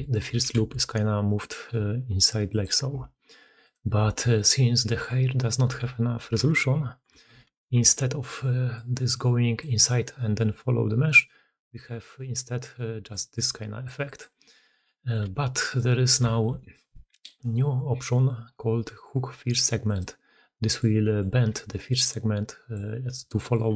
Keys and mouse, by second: 0.0-0.3 typing, 2.3 click, 2.7 g, 3.9-5.6 typing, 5.6 Tab, 7.0 alt+h, 7.6 alt+a, 8.1-14.3 d, 8.6 click, 11.6-11.9 drag, 12.4-13.8 drag, 14.3-15.0 drag, 15.0 d, 15.2 d, 16.1 shift+middle drag, 16.4 middle click, 19.7 middle click, 20.4 middle click, 20.8 middle click, 21.4-23.4 typing, 22.6 click, 22.9-23.4 drag.